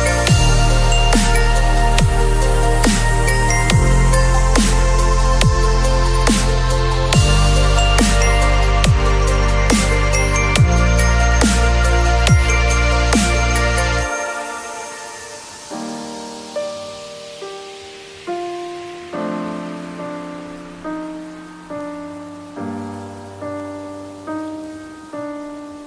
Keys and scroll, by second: 0.5 ctrl+[, 2.1 alt+shift+m, 7.3-8.3 typing, 13.9 ], 14.5 [, 23.1 b, 24.3 [.